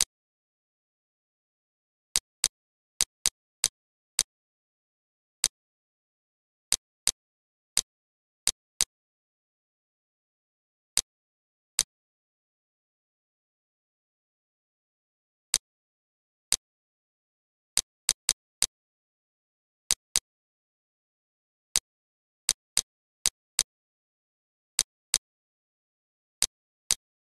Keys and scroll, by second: 0.7 1, 0.9 Return, 10.4 ctrl+z, 14.5 z, 19.4 ctrl+/, 20.5 Delete, 21.0 =, 21.1 -, 21.9 space, 23.0 ctrl+z, 24.4 ctrl+z, 26.0 ctrl+z.